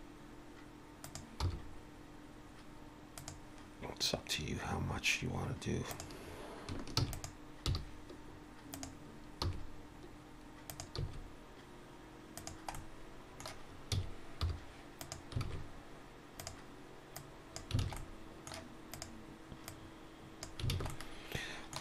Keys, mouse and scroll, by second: 1.4 r, 5.9 click, 7.0 shift+d, 7.7 g, 9.4 r, 11.0 s, 12.7 middle click, 13.9 s, 15.5 alt+a, 16.4 click, 17.2 click, 17.8 alt+a, 18.0 middle click, 18.9 click, 19.7 click, 20.7 alt+a, 20.9 middle click.